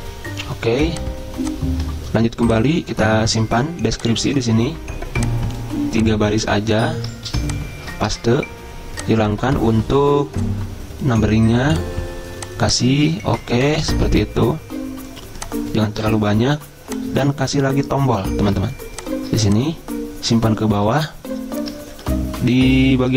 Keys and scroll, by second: 7.5 ctrl+c, 8.3 ctrl+v, 13.5 Delete, 16.2 BackSpace.